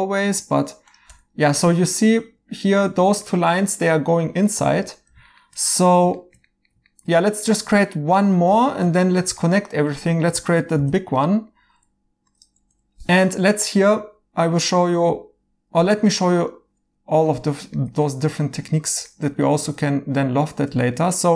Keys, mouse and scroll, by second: 1.0 2, 3.2 right click, 10.7 f, 11.2 right click, 14.4 Escape, 15.9 right click, 17.2 right click, 20.4 right click.